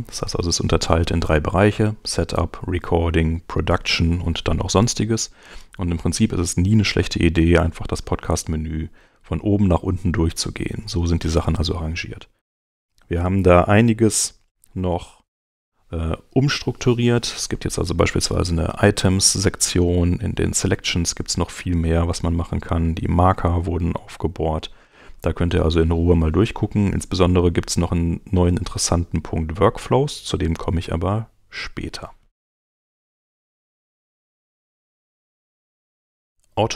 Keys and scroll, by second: 32.6 super+Tab.